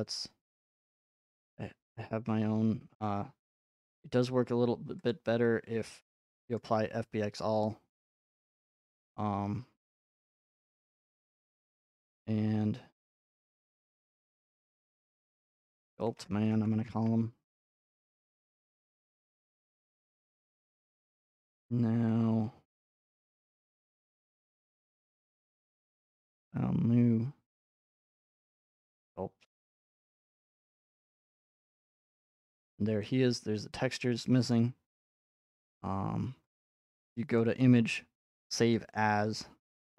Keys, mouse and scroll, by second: 0.5-3.7 middle drag, 0.5 scroll, 1.5 scroll, 5.1-7.2 drag, 8.9 scroll, 10.7-11.2 scroll, 13.3 scroll, 13.9 click, 14.1 click, 14.7 click, 15.5-16.5 typing, 16.5 Return, 17.9 click, 20.5 click, 26.0 click, 26.4 click, 30.1 click, 31.8-34.1 scroll, 34.1 scroll, 34.5 click, 37.1 click, 37.4 click, 38.7 click.